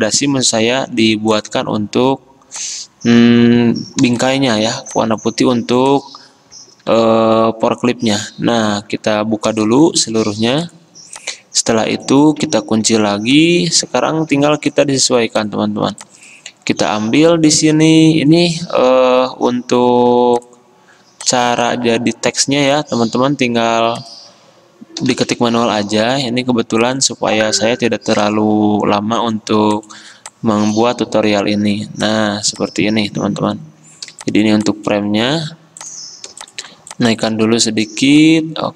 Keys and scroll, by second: 6.9 alt+2, 12.9 2, 14.3 ctrl+g, 19.3 d, 25.1-25.4 typing.